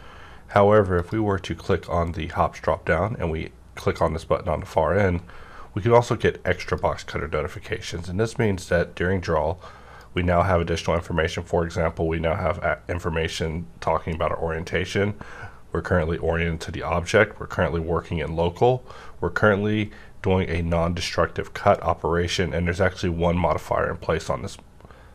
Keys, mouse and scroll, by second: 0.9 click, 6.6-12.3 drag.